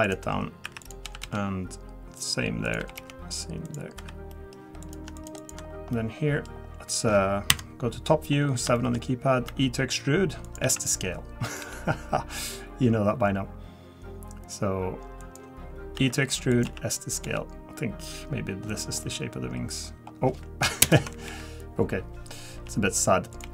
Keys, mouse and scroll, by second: 0.8 click, 1.0 g, 2.6 click, 2.8 g, 4.0 3, 4.3 middle click, 4.8 click, 5.1 shift+click, 5.4 click, 5.7 scroll down 2, 5.9 middle click, 6.4-6.9 scroll down 2, 6.9 middle click, 7.5 KP_7, 8.3-8.7 scroll down 4, 8.7 shift+middle click, 9.0-9.4 scroll up 1, 9.5 e, 10.6 s, 11.6 g, 17.2 g, 19.0 middle click, 20.8 ctrl+KP_Add, 21.2 KP_1, 22.5 r, 23.4 g.